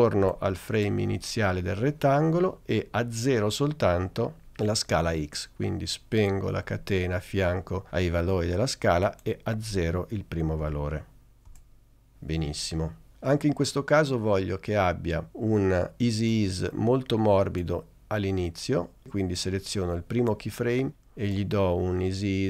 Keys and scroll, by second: 10.7 0, 11.6 Return.